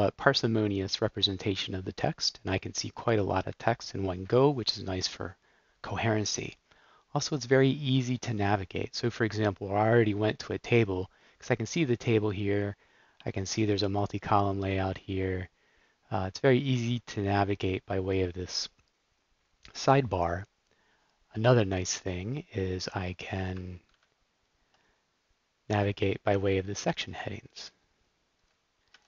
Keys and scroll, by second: 24.0 super+r, 25.7 Down, 26.2 Down, 26.8 Down, 27.5 Down, 28.3 Up, 28.8 Up.